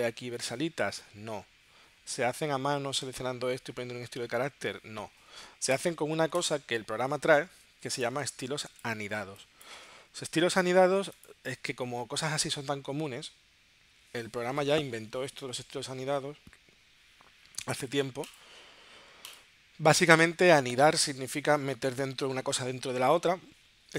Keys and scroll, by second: 8.2 space, 9.2 space.